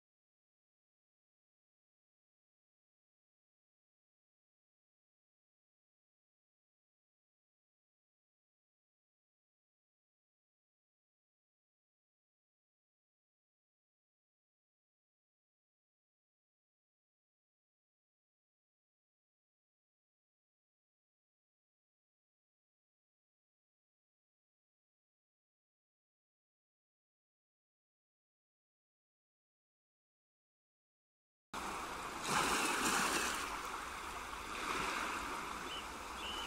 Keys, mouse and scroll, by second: 0.1 ctrl+2, 0.6 right click, 2.0 ctrl+r, 3.6 Tab, 5.3 ctrl+r, 22.6 Tab, 23.2 click, 23.9-24.6 scroll down 2, 24.8 click, 26.7 click, 27.8 middle click, 29.9 middle click, 31.0 middle click, 31.6 middle click, 31.7 middle click, 33.2 scroll up 1, 33.7 middle click, 35.3 middle click, 35.8 middle click, 36.0 middle click.